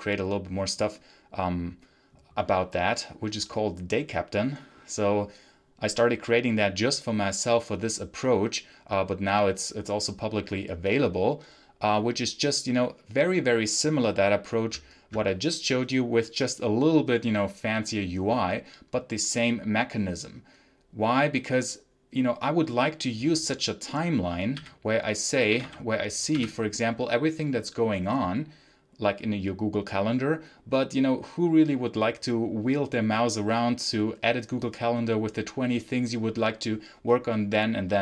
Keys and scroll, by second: 24.4-26.2 typing.